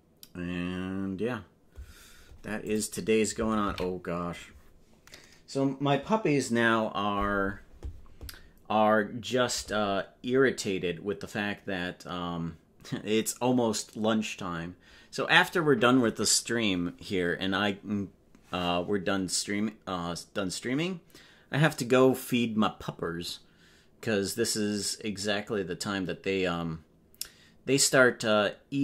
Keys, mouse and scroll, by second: 6.8 ctrl+s.